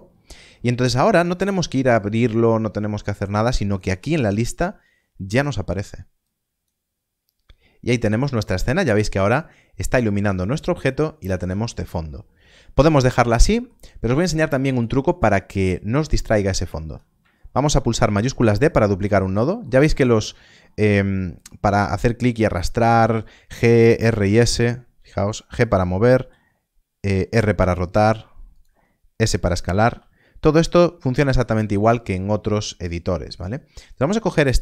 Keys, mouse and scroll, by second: 3.6 click, 6.2 click, 7.8 middle click, 13.7 scroll down 1, 14.6 middle click, 15.2 click, 18.0 shift+d, 19.0 click, 19.4 middle click, 19.8 scroll up 1, 21.3 click, 24.5 shift+click, 24.9 g, 25.8 click, 26.1 click, 28.5 right click, 29.8 right click, 30.6 s, 30.6 right click, 31.7 click.